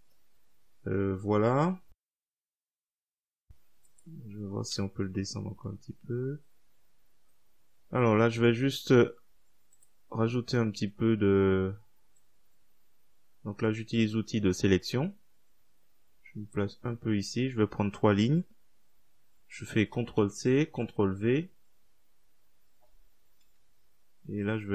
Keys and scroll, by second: 4.8-5.6 typing, 20.0 ctrl+c, 20.6 ctrl+v, 23.6 Down.